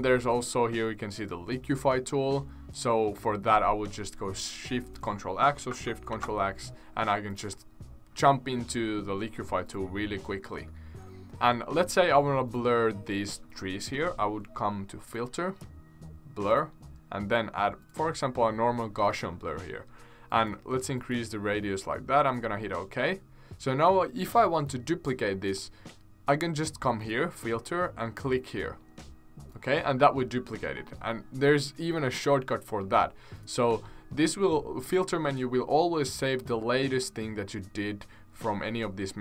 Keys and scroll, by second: 6.1 ctrl+shift+x.